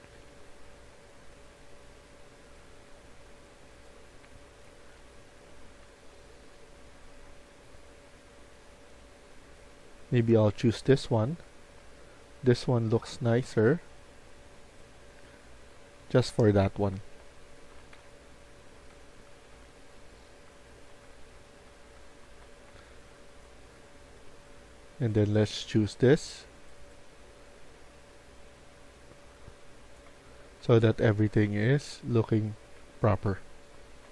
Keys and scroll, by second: 11.4-11.7 typing, 14.7-22.7 typing, 30.0-34.1 typing.